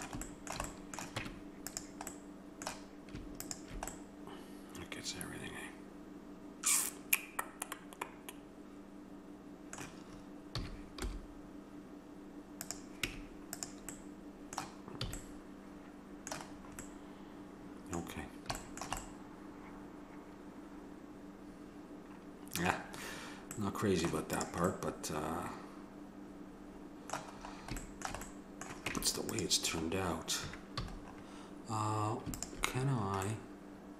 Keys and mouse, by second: 1.2 Tab, 3.4-5.4 drag, 5.4 middle click, 10.6 s, 13.1 Tab, 15.1 a, 18.7-20.8 middle drag, 23.6 middle click, 24.4-26.3 drag, 28.2 middle click, 28.9 Tab, 30.8 a, 32.4-33.9 drag.